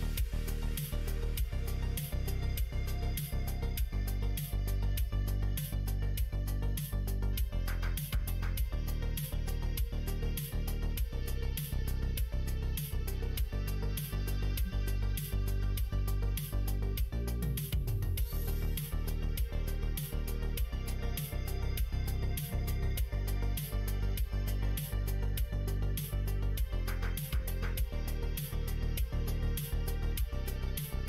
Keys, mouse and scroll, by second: 0.6 ctrl+z, 0.9-2.0 middle drag, 2.7 click, 3.5 g, 4.8 middle click, 5.7 middle click, 7.3 middle click, 7.7 g, 9.2 ctrl+r, 10.4-11.9 middle drag, 12.0 ctrl+z, 14.2 middle click, 14.6 ctrl+r, 17.1 g, 20.3-21.3 middle drag, 21.6 click, 22.5 2, 22.8 click, 23.6 click, 24.6 f, 25.5 click, 26.3 click, 27.5 f, 27.9 middle click, 28.6 middle click, 30.1 click.